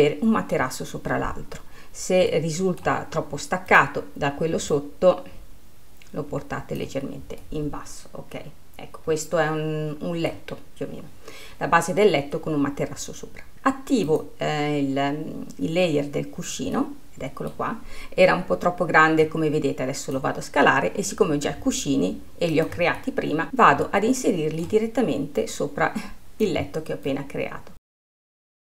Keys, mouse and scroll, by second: 2.5-3.9 middle drag, 3.9-5.2 drag, 7.6-10.6 middle drag, 14.4 click, 17.1-19.5 middle drag, 19.5 click, 21.9 s, 22.8 s, 23.3-25.7 middle drag, 25.7 click, 27.5 click, 28.3 middle click.